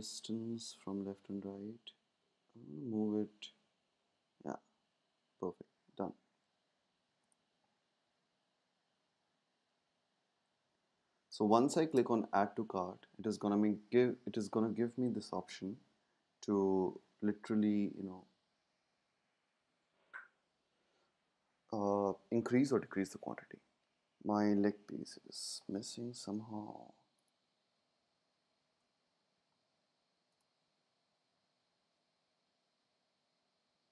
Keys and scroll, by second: 1.4 Left, 1.4 Left, 3.9 Down, 4.0 Down, 11.4 space, 28.5 shift+super+g.